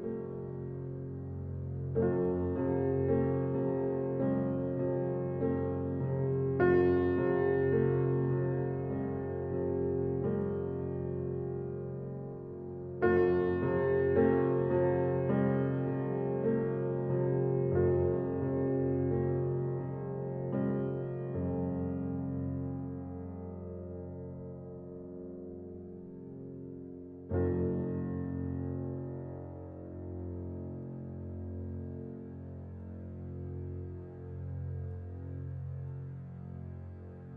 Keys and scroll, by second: 23.6 ctrl+t.